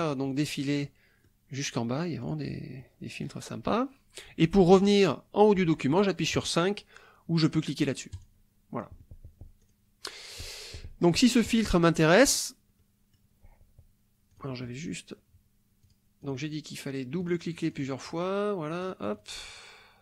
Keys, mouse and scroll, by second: 0.3-1.4 middle drag, 2.2 click, 2.8 middle click, 8.1 click, 9.6 click, 10.6 click, 12.2 click, 12.8 click, 14.3 click, 15.8 click, 16.2 click, 17.2-18.4 drag, 18.7 click, 19.5 click.